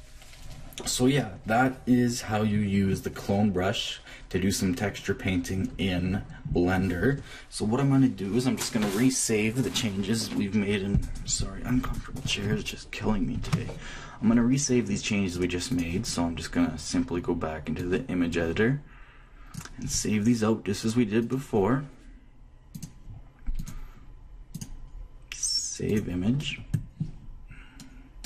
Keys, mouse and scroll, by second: 15.3-17.3 drag, 17.7-21.3 drag, 22.7-26.6 drag.